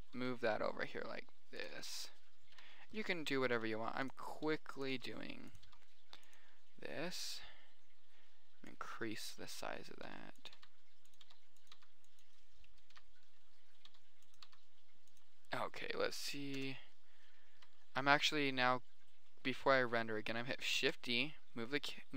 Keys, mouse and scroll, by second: 0.4 g, 1.4 click, 2.0 click, 2.9-6.0 typing, 3.2 middle click, 3.8 middle click, 10.3 r, 10.8 g, 11.6 r, 12.1 g, 12.8 middle click, 13.3 KP_2, 13.3 KP_3, 13.4 middle click, 14.0 click, 14.2 r, 14.6 click, 14.8 g, 16.9 KP_0, 17.9 KP_7, 21.2 shift+d.